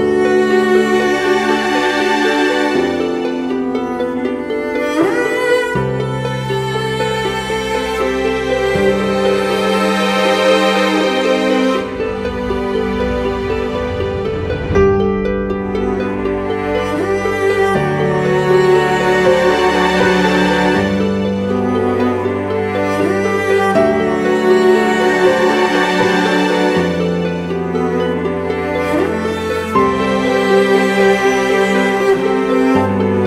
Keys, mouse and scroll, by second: 0.8 alt+click, 4.6 double click, 5.8-7.1 typing, 15.4 typing, 16.3 double click.